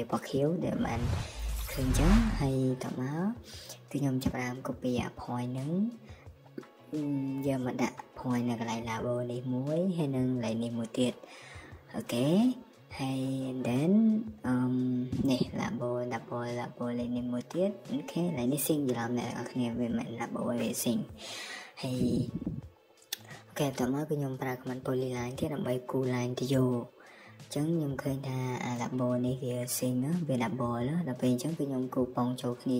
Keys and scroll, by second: 2.7-3.1 typing, 20.9 Escape, 23.0-23.7 typing.